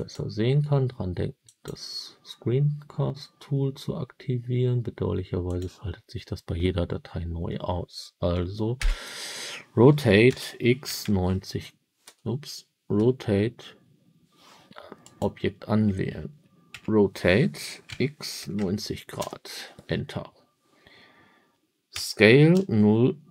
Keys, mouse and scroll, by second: 0.0 click, 1.4 click, 5.4 click, 8.7 r, 10.2 x, 12.9 r, 14.9 click, 16.6 r, 17.8 x, 18.3 9, 18.5 0, 19.1 Return, 21.8 s, 22.4 0.